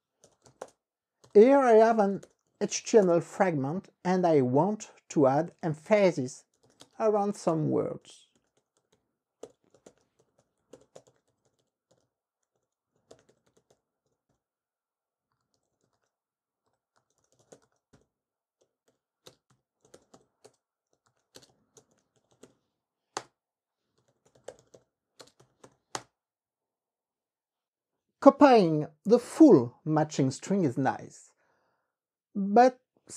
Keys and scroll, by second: 0.6-3.1 typing, 0.7 Return, 3.1 Return, 5.3-25.6 typing, 12.7 alt+-, 23.3 KP_Enter, 25.8 KP_Multiply, 26.0 KP_Enter.